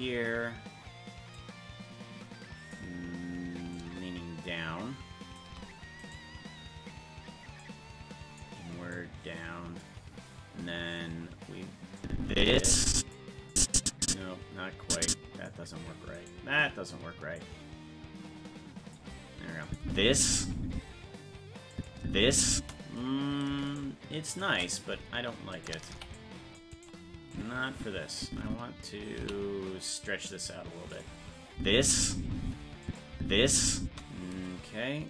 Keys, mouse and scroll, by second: 1.4-2.7 drag, 3.7-5.4 shift+drag, 6.1-7.6 right drag, 7.6 click, 8.9 click, 12.0-13.1 drag, 13.5-15.5 drag, 16.2-17.4 right drag, 17.4-19.0 drag, 19.7 click, 19.8 space, 21.2 space, 21.7 click, 22.0 space, 23.8 shift+right click, 25.5 right click, 25.9 c, 27.3-28.8 drag, 29.2 s, 31.5 space, 32.8 click, 32.8 space, 33.1 space.